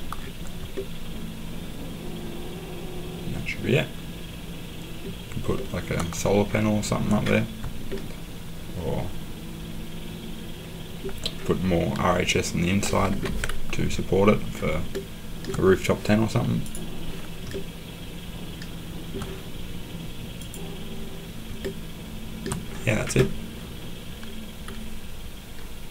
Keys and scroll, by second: 13.1 Escape.